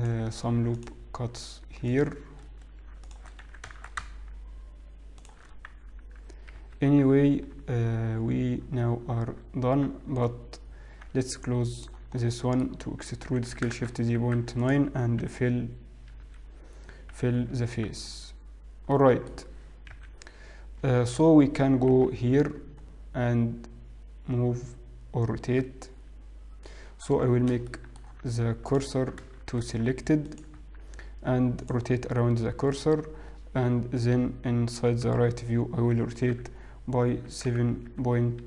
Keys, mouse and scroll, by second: 1.2 ctrl+r, 3.2 alt+shift+click, 3.5 s, 5.5 scroll down 1, 6.0-7.8 scroll down 3, 6.0 z, 7.8 Tab, 8.4-8.9 scroll up 2, 8.9-9.9 scroll down 1, 10.5 Tab, 10.5-11.2 scroll up 2, 11.9 alt+click, 12.8 middle click, 13.9 shift+e, 15.6 d, 16.2 Escape, 18.0 f, 18.2 scroll down 3, 19.4 middle click, 20.0 KP_1, 22.0 KP_3, 23.2-25.4 scroll up 3, 26.1-27.2 scroll down 1, 27.7 middle click, 28.9 alt+click, 29.4 shift+s, 31.7 Tab, 31.7 click, 34.2 KP_1, 35.1 KP_3, 36.9 r.